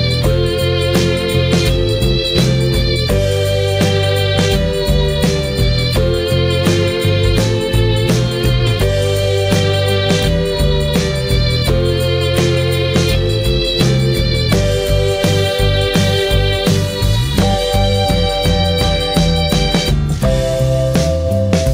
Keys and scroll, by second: 9.2 ctrl+z, 9.7 ctrl+z, 11.2 ctrl+t.